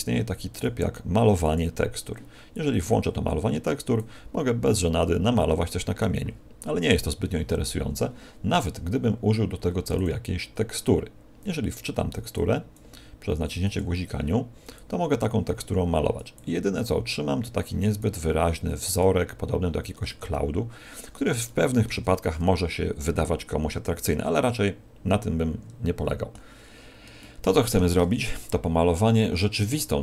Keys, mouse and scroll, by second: 1.5 click, 2.5 click, 3.9 click, 9.9 click, 11.0 scroll down 3, 12.3 click, 13.6 click, 14.7 click, 16.3 click, 19.2-19.8 scroll up 5, 20.0 middle click, 21.4 shift+middle click, 26.8-27.2 scroll down 1, 27.2 shift+middle click.